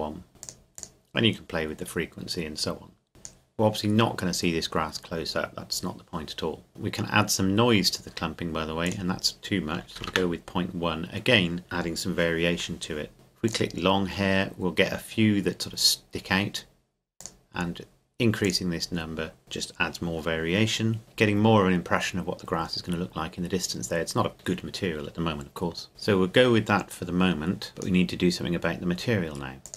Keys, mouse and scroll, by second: 0.4 click, 3.1 click, 6.7 click, 8.8 click, 9.8 KP_Decimal, 10.0 KP_1, 10.1 KP_Enter, 13.5 click, 17.2 click, 25.9 click, 27.7 click.